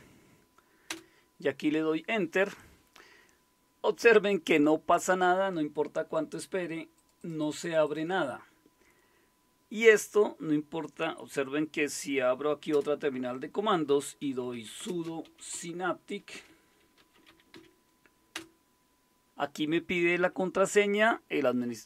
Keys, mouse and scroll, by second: 0.9 Return, 6.9 click, 7.4 click, 7.8 click, 12.7 super+Return, 14.2-18.0 typing, 18.3 Return.